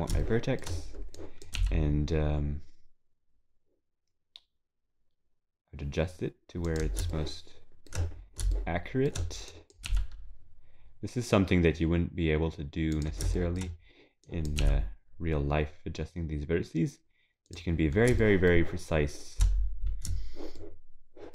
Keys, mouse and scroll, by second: 1.2 click, 7.2 shift+middle click, 8.2 scroll down 3, 8.5 shift+middle click, 9.0 scroll down 1, 9.5 click, 9.9 g, 13.4 shift+middle click, 13.7-14.2 scroll up 1, 14.2 click, 14.2-14.6 scroll up 1, 17.8 scroll down 4, 18.2 shift+middle click, 20.6 shift+middle click.